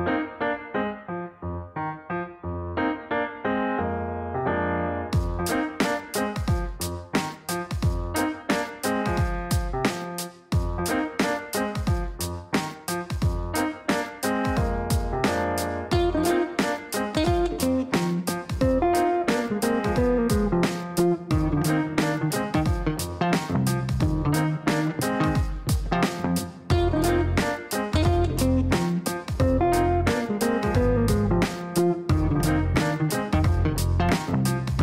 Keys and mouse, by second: 0.4 click, 2.8 ctrl+v, 3.8 click, 5.2 KP_Multiply, 5.4 KP_2, 6.7 click, 8.0 KP_Multiply, 8.6-12.4 typing, 9.8 KP_Add, 13.0 Down, 14.5-15.4 typing, 15.5 Down, 15.8 Return, 17.3 click, 18.1 click, 19.3 click, 23.4 click, 24.0 click, 24.4 right click, 25.7 click, 34.4 click, 34.6 click.